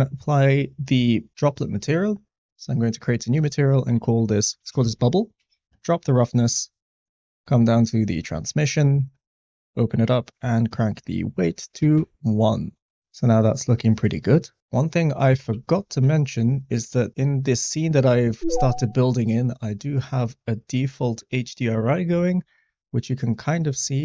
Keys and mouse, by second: 3.4-5.6 drag, 10.1-11.3 drag, 15.7 shift+middle click, 16.9 shift+middle drag, 23.9 shift+middle click.